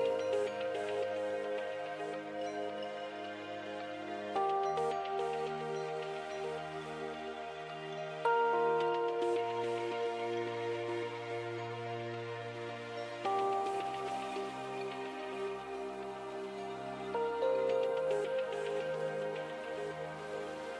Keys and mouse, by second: 2.3-4.7 middle drag, 4.7 e, 6.3 e, 8.9-11.1 drag, 11.1-15.9 right drag, 15.9-19.3 drag, 17.4 g, 19.8 e.